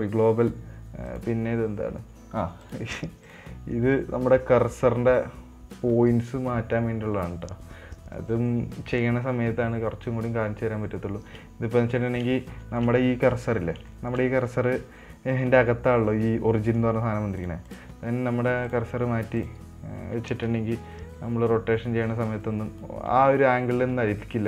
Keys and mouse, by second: 1.4 click, 3.7-11.2 drag, 12.4 middle drag, 12.9-13.2 shift+middle drag, 14.3 shift+middle drag, 14.6 middle drag, 18.1-19.1 drag, 23.9 middle click.